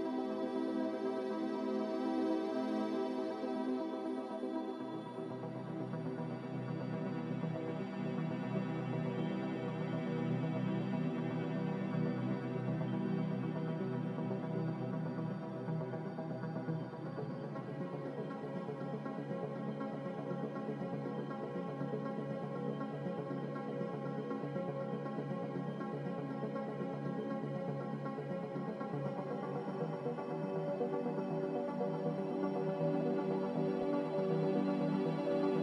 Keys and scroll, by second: 3.1 n, 9.4 a, 11.4 Return, 11.4 8, 11.4 5.